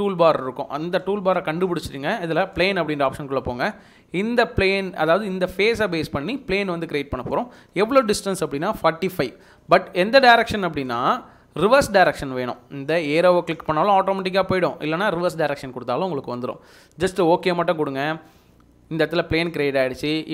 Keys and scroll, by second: 8.2-9.1 typing.